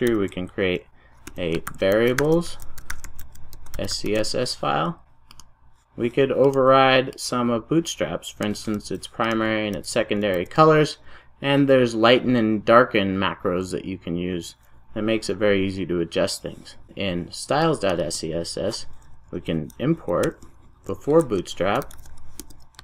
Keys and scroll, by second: 0.2 super+n.